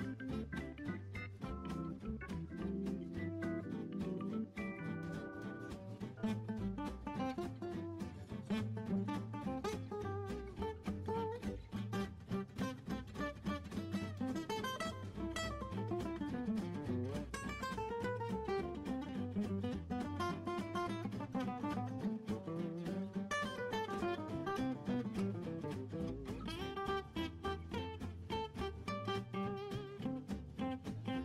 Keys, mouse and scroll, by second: 0.3-3.9 drag, 9.0 click, 9.5-10.8 drag, 10.8 space, 11.8 space, 13.4 space, 13.8-15.7 drag, 15.7 right click, 18.5-19.0 scroll up 3, 19.7-22.8 drag, 26.0 click, 29.0-31.2 drag.